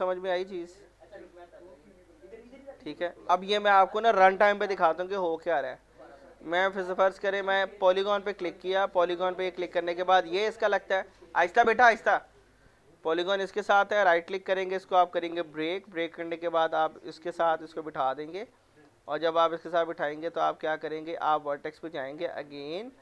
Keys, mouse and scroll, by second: 0.8 scroll up 1, 1.1 scroll down 1, 1.4 middle click, 1.8-2.6 scroll down 1, 2.6 middle click, 3.1 middle click, 4.0 scroll up 1, 4.8 scroll down 1, 5.0 middle click, 5.5-5.8 scroll down 1, 5.8 middle click, 7.9 click, 9.6 scroll up 1, 11.3 middle click, 13.4-13.9 scroll up 1, 13.9 right click, 15.1 click, 15.5 middle click, 15.7 scroll down 1, 16.3 click, 17.4 middle click, 17.6 scroll up 1, 18.4 click, 21.7 scroll up 1, 22.2 click, 22.8 scroll up 1.